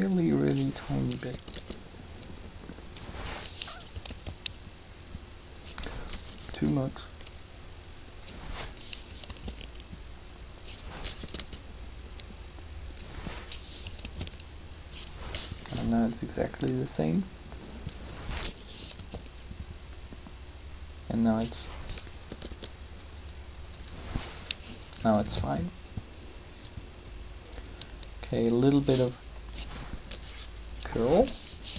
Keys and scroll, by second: 1.2 Up, 4.1 alt+a, 6.2 Up, 9.2 alt+a, 11.2 Up, 14.0 alt+a, 15.7 Up, 18.9 alt+a, 22.2 Up, 25.1 alt+a, 31.6 r.